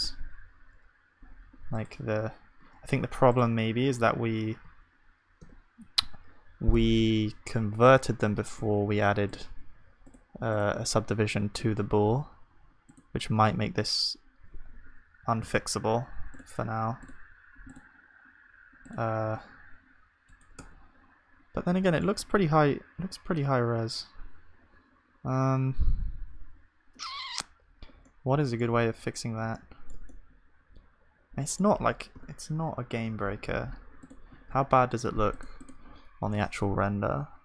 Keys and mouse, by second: 0.8-3.9 middle drag, 3.9 Tab, 4.6 a, 5.4 Tab, 15.4 ctrl+z, 20.6 Tab, 20.6-22.9 drag, 22.9-25.7 middle drag, 25.7 Tab, 29.0-32.2 middle drag, 32.2 KP_0, 33.0 ctrl+s, 35.5-37.4 drag.